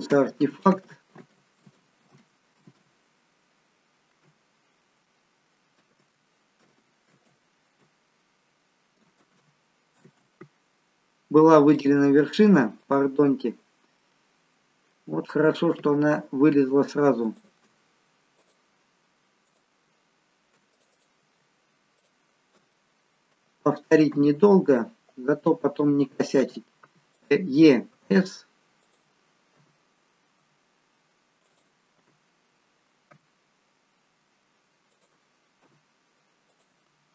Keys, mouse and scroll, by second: 0.3 ctrl+z, 1.1 ctrl+z, 2.1 ctrl+z, 2.5 ctrl+z, 5.9 ctrl+z, 7.2 ctrl+z, 8.6 ctrl+z, 9.4 ctrl+z, 11.2 ctrl+z, 11.7 click, 12.3 middle click, 13.5 middle click, 14.1 middle click, 17.4 alt+shift+click, 18.4 click, 19.5 click, 21.2 click, 22.0-22.4 alt+shift+click, 22.7 middle click, 24.1 KP_7, 26.9 e, 27.9 s, 29.7 e, 32.4 e, 36.5 e, 36.8 s.